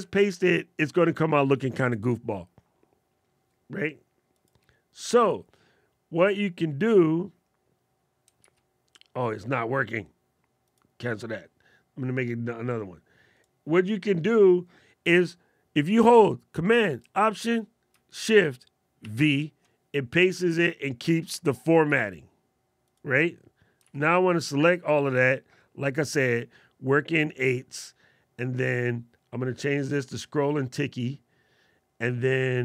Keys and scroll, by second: 1.7 super+z, 8.1 super+z, 18.7 alt+shift+super+v, 21.6 super+z, 23.5 super+a.